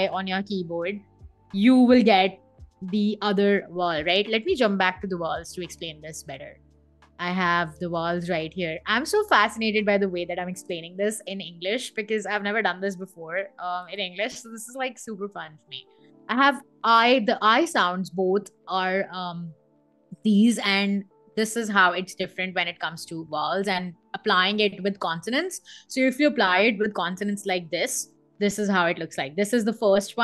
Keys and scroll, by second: 12.5 Escape, 12.9 v.